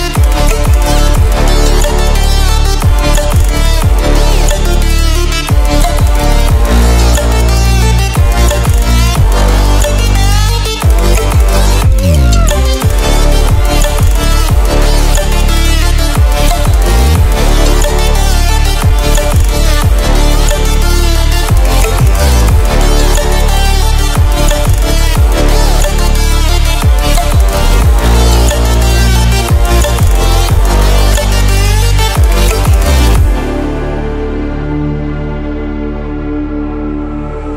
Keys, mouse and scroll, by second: 0.9 Delete, 2.1 click, 2.9-3.4 ctrl+alt+scroll down 1, 3.4 ctrl+alt+scroll up 1, 4.7 click, 5.6 Delete, 6.6 click, 7.2 Delete, 9.2-9.5 ctrl+alt+scroll down 1, 10.1-10.9 ctrl+alt+scroll up 1, 10.9 click, 12.0 ctrl+w, 15.2 ctrl+w, 15.6 ctrl+w, 16.4-25.7 drag, 25.7 ctrl+w, 31.9 ctrl+w, 33.7 ctrl+w, 35.5 ctrl+w, 37.4 ctrl+w.